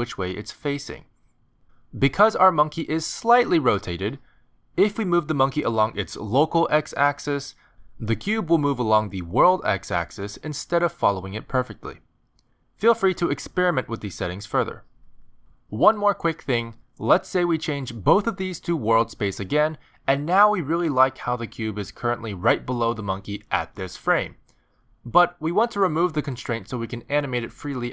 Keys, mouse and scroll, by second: 0.3 click, 1.0 middle click, 1.0 r, 1.5 middle click, 2.0 g, 4.7 r, 5.5 middle click, 6.9 g, 8.2 g, 11.0 click, 15.2 middle click, 16.8 shift+middle click, 17.7 click, 18.3 shift+middle click, 19.4 click, 22.2 middle click.